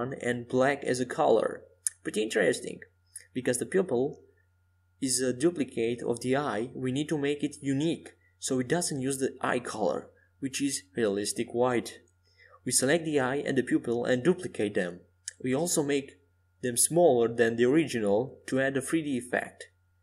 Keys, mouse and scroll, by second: 3.5-6.9 drag, 5.9 Tab, 8.0-10.5 right drag, 12.2-14.6 right drag, 13.2-15.7 drag, 18.0 ctrl+alt+shift+c.